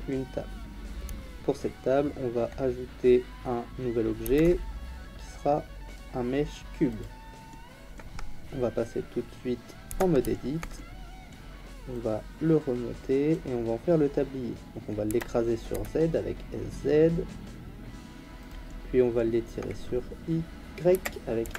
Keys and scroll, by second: 4.2 shift+a, 9.9 Tab, 15.1 s, 15.7 z, 20.9 s, 21.4 y.